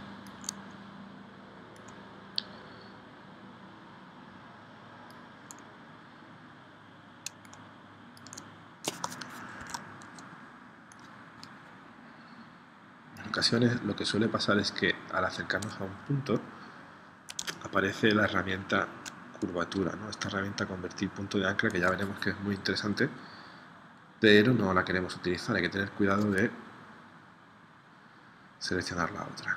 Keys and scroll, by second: 9.6 super+z.